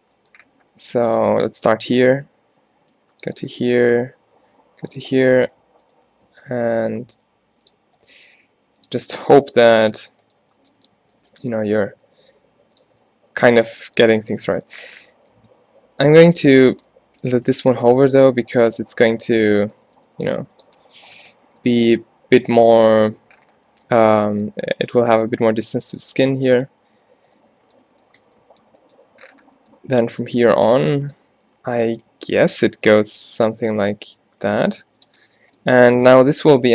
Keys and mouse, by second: 0.3 middle click, 1.0 g, 1.6 e, 2.3 middle click, 3.5 e, 5.5-6.8 drag, 6.8 g, 8.4 g, 11.6 shift+Tab, 11.9 g, 16.3 g, 17.4 g, 18.3 g, 18.7 middle click, 21.3 g, 27.8 middle click, 27.9 middle click, 28.6 shift+Tab, 30.3 e, 32.7 e, 34.6 e, 35.3-36.7 middle drag.